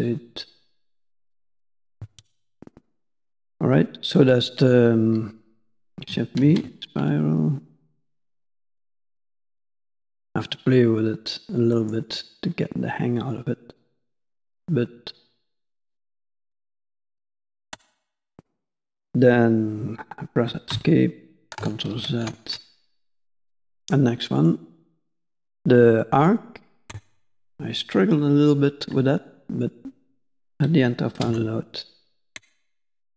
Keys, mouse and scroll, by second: 16.0 middle click, 21.9 ctrl+z, 22.8 middle click, 31.9 click, 32.3 Tab.